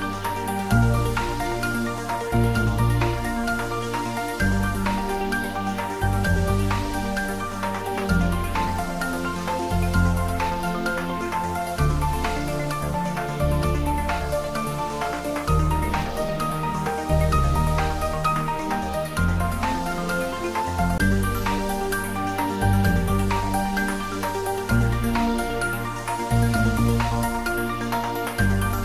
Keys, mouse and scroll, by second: 8.3 shift+click, 9.6-13.4 shift+drag, 13.4-18.3 shift+drag, 18.3-22.2 shift+drag, 22.2-26.4 shift+drag, 26.4-28.8 shift+drag.